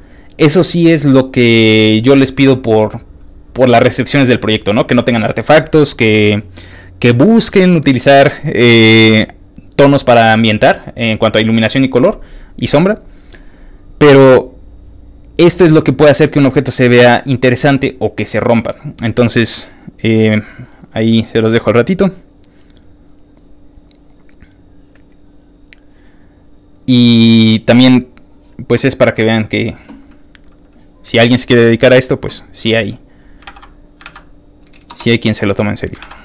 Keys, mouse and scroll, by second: 6.3 ctrl+click, 9.2 ctrl+click, 12.8 ctrl+click, 15.0 ctrl+click, 19.5 ctrl+click, 20.4 ctrl+click, 22.0 ctrl+click, 23.3 ctrl+click, 24.4 ctrl+click, 25.7 ctrl+click, 26.3 ctrl+click, 28.2 ctrl+click, 29.4 ctrl+click, 30.5 ctrl+click, 31.2 ctrl+click, 31.9 ctrl+click, 32.9 ctrl+click, 33.5 ctrl+v, 34.1 ctrl+a, 34.9 BackSpace, 35.7 ctrl+click, 36.0 ctrl+w.